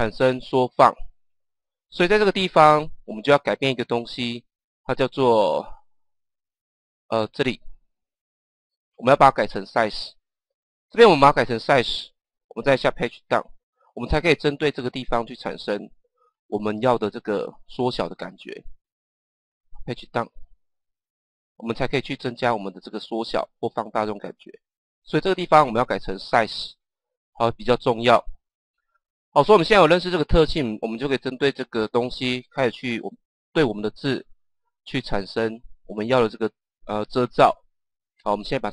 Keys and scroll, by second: 13.2 Page_Down, 20.3 Page_Down.